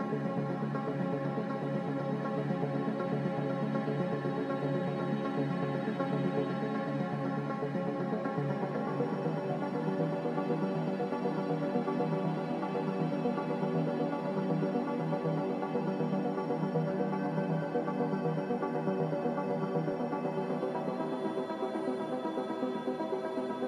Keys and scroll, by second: 3.5 z, 7.0 ctrl+z, 16.3 a, 18.1 ctrl+z, 23.1 z.